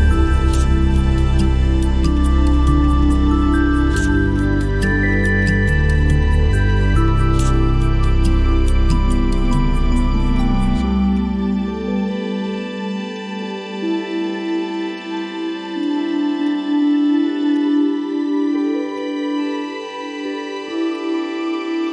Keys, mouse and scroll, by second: 3.0 double click, 11.1 ctrl+click.